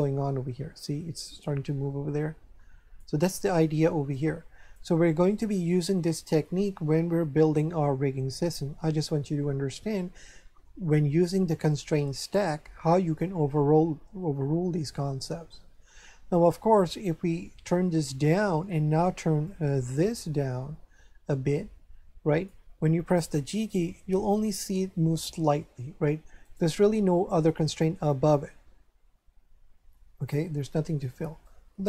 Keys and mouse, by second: 0.0 click, 4.1 click, 16.8 click, 19.5 click, 23.8 g, 26.4 right click, 31.4 click.